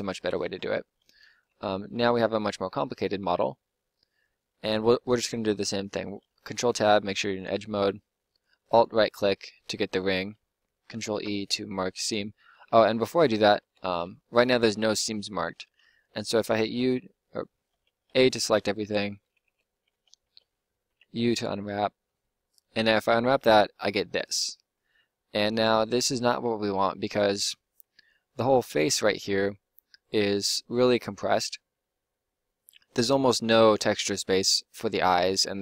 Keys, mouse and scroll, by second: 0.1 Tab, 1.4 Tab, 6.5 ctrl+Tab, 11.1 ctrl+e, 13.6 Tab, 16.3 u, 18.1 a, 18.4 a, 18.8 a, 19.4 Tab, 19.9 a, 20.2 a, 20.9 u.